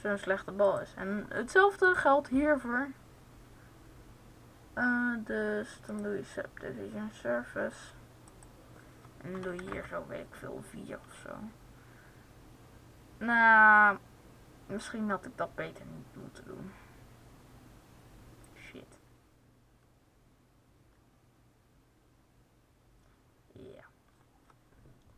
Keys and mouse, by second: 8.2-25.1 drag.